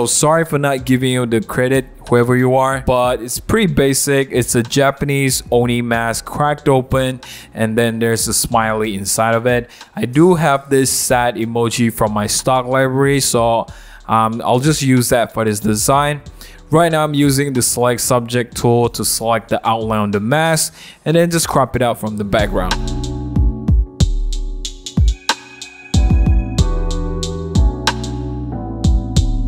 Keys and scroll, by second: 4.7 super+z, 7.5 super+z, 24.1-27.4 typing, 24.2 super+a, 24.3 super+c, 24.3 super+d, 24.6 super+t, 25.0 Return, 25.0 super+j, 25.1 super+g, 28.6 Return, 28.7 super+0, 28.7 super+-, 28.9 super+z, 29.2 super+z, 29.2 super+z.